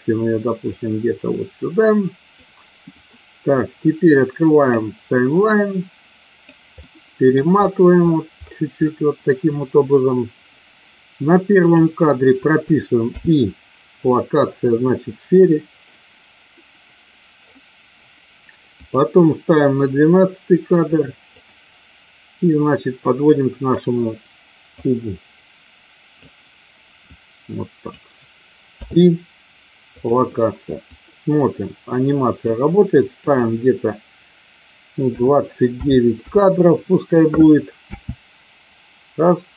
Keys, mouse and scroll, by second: 1.4-2.4 drag, 4.4 click, 5.6 click, 6.8 middle click, 11.5 click, 18.8 click, 21.3-23.7 drag, 24.8-26.2 drag, 27.2 click, 28.7 i, 30.8-32.6 drag, 33.2-36.4 drag, 37.9 space.